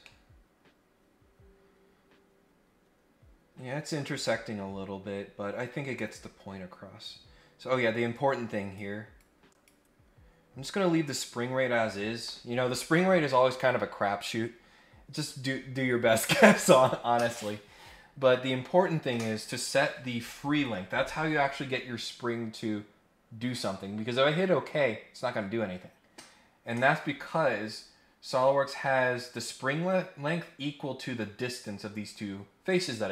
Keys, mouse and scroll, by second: 0.0-0.5 scroll up 1, 5.3 scroll down 1, 8.1 click, 9.2 click, 28.0-28.3 scroll down 4, 28.3-29.1 scroll up 4, 29.3 scroll down 2.